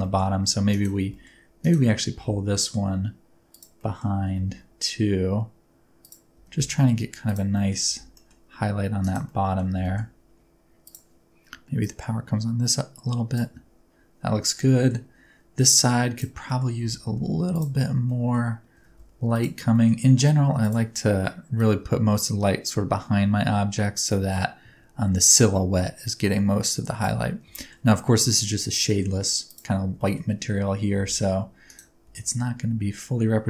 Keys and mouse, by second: 0.0 middle click, 0.7 click, 1.0 g, 1.1 middle click, 1.8 middle click, 2.1 g, 2.5 middle click, 3.5 click, 3.8 middle click, 4.2 r, 4.4 x, 6.0 click, 6.3 g, 6.5 z, 7.2 click, 7.5 middle click, 7.8 g, 8.1 middle click, 9.0 click, 9.3 middle click, 9.7 g, 9.8 middle click, 10.8 click, 11.7-13.3 drag, 14.7 middle click, 16.4 middle click, 16.7 g, 17.0 z, 17.5 click, 18.0 middle drag, 18.7 r, 18.9 z, 19.3 click, 19.6 g, 19.7 middle click, 20.6 click, 21.6-27.1 drag, 27.5 shift+click, 28.9 middle click, 29.9 shift+middle click, 30.9 g, 31.0 middle click, 31.6 click, 32.0 g, 32.1 middle click.